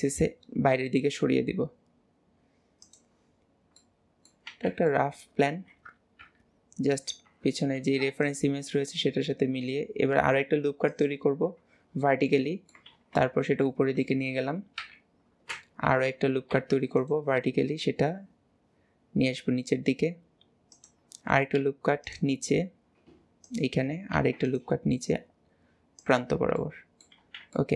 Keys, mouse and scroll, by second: 3.4-3.8 scroll down 1, 5.0 middle click, 6.3 KP_3, 7.8 ctrl+r, 12.3 middle click, 13.2-14.8 middle drag, 14.9 KP_3, 15.6 alt+z, 16.6 ctrl+r, 24.2 ctrl+r, 26.6 middle click, 27.6-27.7 middle drag.